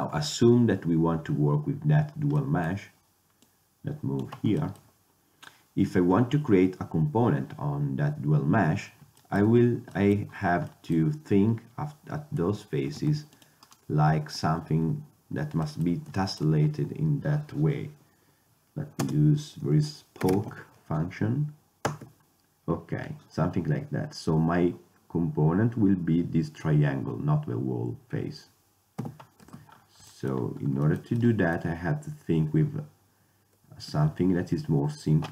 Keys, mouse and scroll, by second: 2.5-3.5 middle drag, 3.5-5.5 drag, 6.9-11.0 middle drag, 12.5 Tab, 13.1 ctrl+Tab, 13.7-15.5 drag, 19.1 space, 29.1 f, 29.5 Tab, 34.0 shift+a.